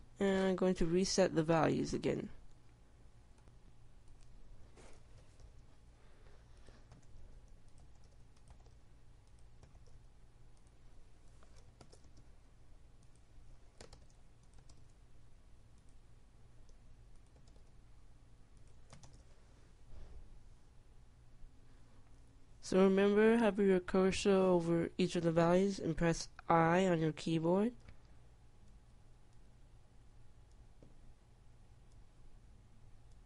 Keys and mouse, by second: 4.0-14.8 drag, 15.3 KP_1, 16.5 KP_Enter, 23.0 i, 26.1 i, 28.5 i, 29.4 i, 30.1 i, 31.4 i, 32.7 i.